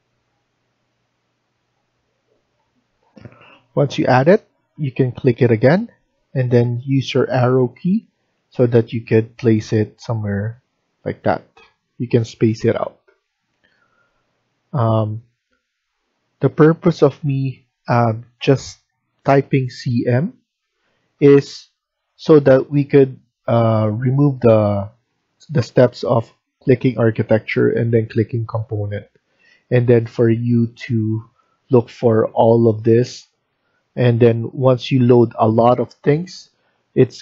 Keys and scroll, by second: 2.5 Escape, 2.8 Escape, 3.0 Escape, 7.2 Up, 7.9 Left, 8.1 Left, 13.7 Up, 13.7 Escape.